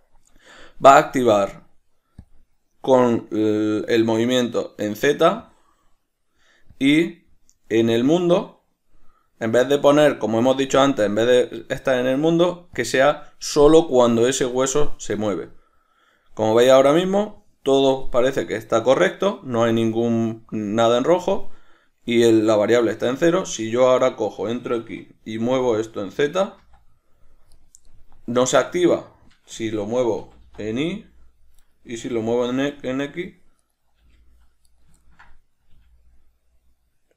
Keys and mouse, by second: 12.0-24.3 drag, 24.3 right click, 25.7 g, 27.9 right click, 29.0-30.5 middle drag, 30.5 g, 32.0 right click, 32.2 g, 34.0 right click, 34.3 g, 35.0 right click, 35.4-37.1 ctrl+middle drag, 36.0 g.